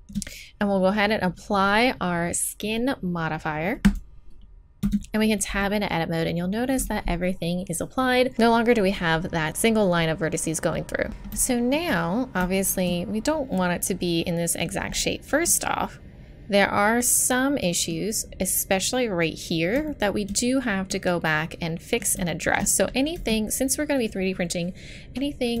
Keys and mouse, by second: 3.8-7.3 drag, 4.8 Tab, 11.1 z, 23.2 z, 23.9-25.6 middle drag.